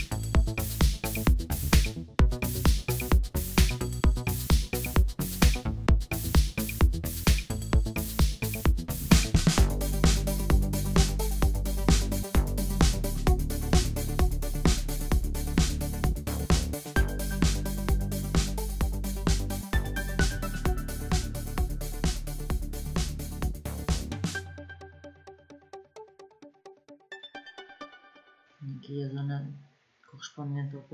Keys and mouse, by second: 1.7-3.3 middle drag, 8.8-11.8 middle drag, 11.9 middle click, 14.3-16.4 middle drag, 18.6-19.4 drag, 22.4 p, 25.8-28.0 drag, 28.4-30.9 middle drag.